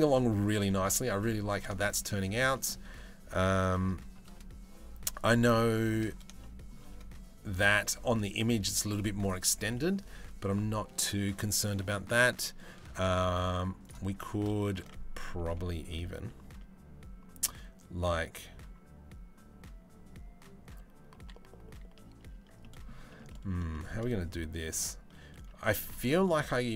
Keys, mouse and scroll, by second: 0.3 shift+middle click, 1.4 shift+middle drag, 2.1 middle click, 4.9 shift+middle drag, 6.0 shift+middle drag, 9.5 middle click, 11.5 shift+middle click, 13.7 Tab, 14.2 shift+middle click, 15.5 Tab, 21.7 Tab, 21.9 Tab, 22.2 middle click, 22.7 shift+middle click, 22.9 middle click, 23.3 shift+middle click, 24.0 middle click, 25.4 shift+middle click.